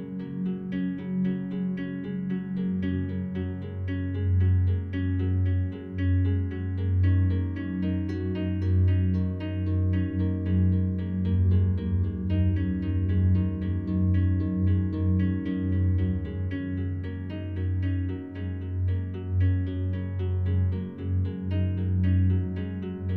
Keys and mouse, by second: 0.0 click, 0.4 click, 1.6 g, 2.0 z, 2.5 click, 3.3 1, 4.3-6.4 drag, 6.8-8.3 drag, 6.8 typing, 8.4 typing, 9.6-11.8 drag, 11.8 s, 12.2 click, 12.9 g, 13.3 z, 13.9 click, 14.3 click, 15.2 g, 15.5 z, 16.6 click, 18.1 Tab, 21.0-21.9 drag, 21.9 typing, 22.6 click.